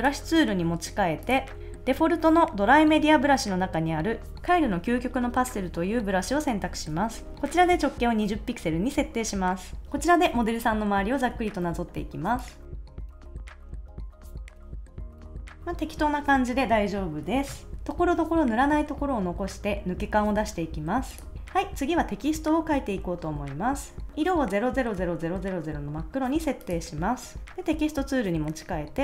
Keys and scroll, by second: 14.5 super+z, 14.9 super+z.